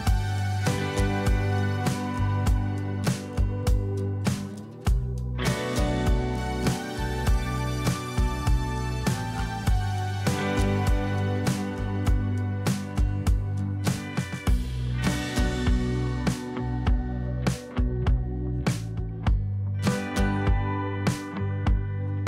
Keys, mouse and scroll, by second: 9.7 double click, 10.3 ctrl+0, 12.4-12.7 alt+scroll down 1, 18.4 double click, 19.1 Return.